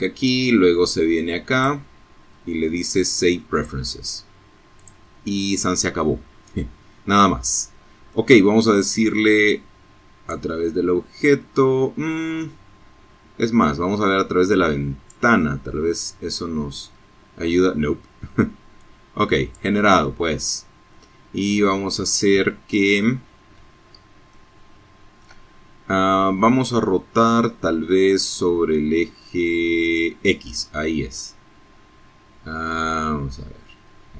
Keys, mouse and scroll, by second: 1.6 click, 2.9 click, 5.3-6.4 middle drag, 7.3-8.6 drag, 11.7-13.4 drag, 16.8 click, 21.0-21.6 scroll up 2, 21.6-22.4 shift+scroll up 3, 22.4-25.5 shift+middle drag, 28.6-33.4 drag, 34.0-34.1 drag.